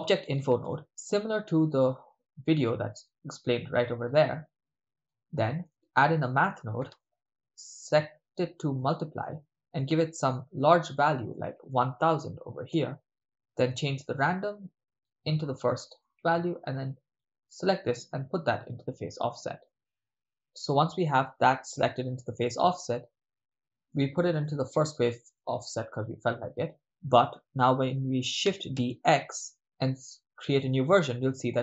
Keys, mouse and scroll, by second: 4.0 middle click, 4.6 click, 5.4 middle click, 5.9 shift+a, 9.2-10.8 drag, 11.4-12.8 drag, 12.3 0, 12.4 0, 14.2 click, 14.4-15.1 drag, 15.7 middle click, 17.2-19.4 drag, 19.7 middle click, 19.7-20.8 drag, 22.8 middle click, 23.9 middle click, 24.4 ctrl+middle click, 25.4 middle click, 26.8 ctrl+middle click, 29.6 shift+d, 30.7 drag.